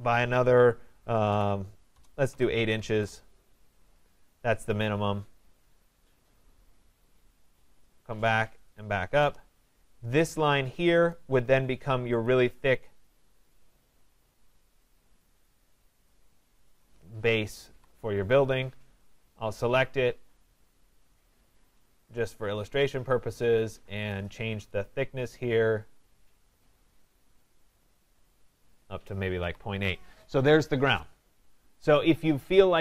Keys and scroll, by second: 1.9 BackSpace, 9.2 Return, 17.6 Escape, 29.2 Escape.